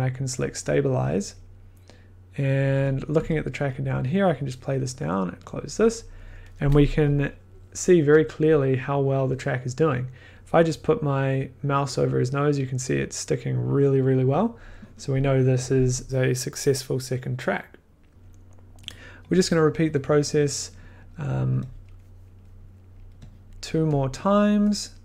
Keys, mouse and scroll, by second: 0.4 click, 3.0 click, 3.1 1, 4.3 click, 5.4 click, 10.5 click, 18.8 click, 20.9 click, 21.0 click, 21.8 click, 21.9-22.6 scroll, 23.4 click, 23.4-23.9 scroll, 24.5 scroll.